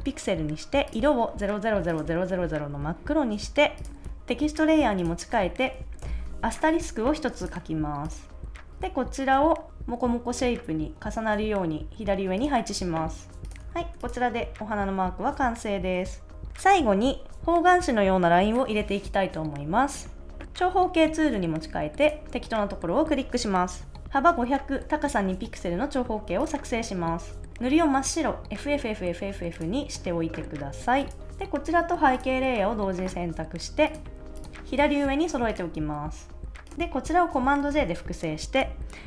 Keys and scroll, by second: 6.0 shift+;, 13.6 super+s, 37.5 super+j.